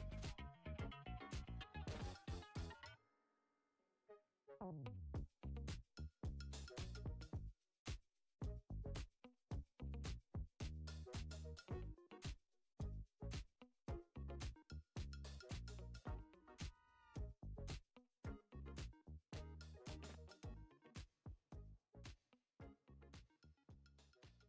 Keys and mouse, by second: 0.5 g, 6.2 shift+click, 7.2 shift+d, 10.5 shift+right click, 11.0 shift+right click, 12.1 g, 14.2 click, 14.8-18.1 middle drag, 18.6 click, 19.1 Tab, 20.9 middle click, 22.1 drag, 23.1 click, 23.5 alt+shift+click, 23.8 alt+shift+click.